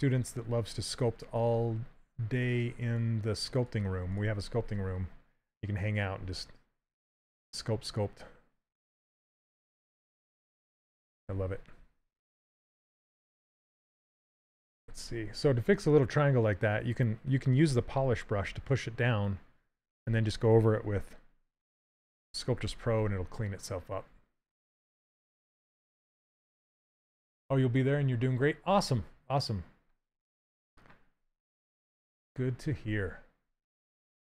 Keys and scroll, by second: 14.0 shift+f, 21.0 shift+f.